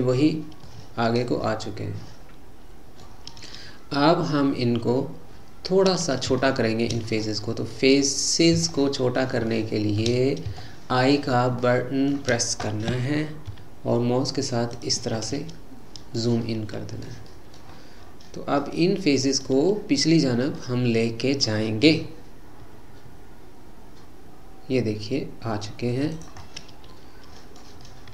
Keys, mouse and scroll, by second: 0.7-3.8 middle drag, 5.8-6.5 scroll up 2, 6.5-8.2 shift+middle drag, 8.2-8.6 scroll up 2, 8.7-10.3 shift+middle drag, 10.3-10.7 scroll up 1, 10.7-13.6 shift+middle drag, 15.2-17.7 middle drag, 17.7-18.7 scroll down 5, 18.7 middle click, 19.6-20.3 scroll down 2, 20.3-20.6 scroll down 3, 20.6-22.7 middle drag, 22.7 e, 26.4-28.1 middle drag.